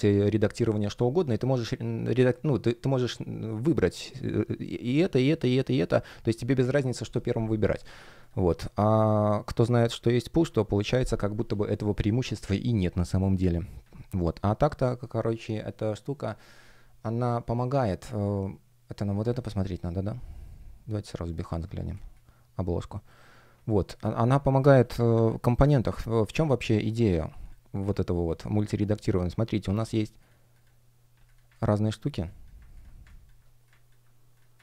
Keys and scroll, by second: 10.2 Delete, 21.8 space, 25.0 super+\.